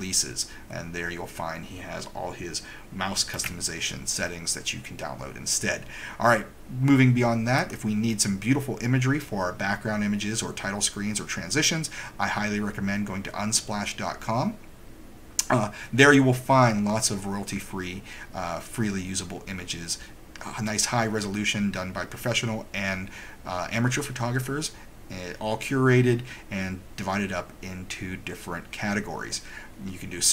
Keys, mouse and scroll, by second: 3.3 super+Escape, 7.7 click.